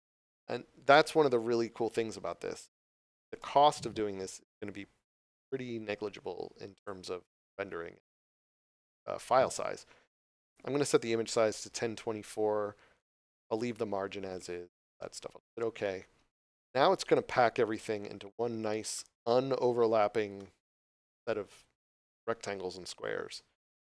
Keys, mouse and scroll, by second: 6.7 click, 16.3 click, 18.0 scroll up 1, 18.9 shift+middle click, 19.7 scroll up 1.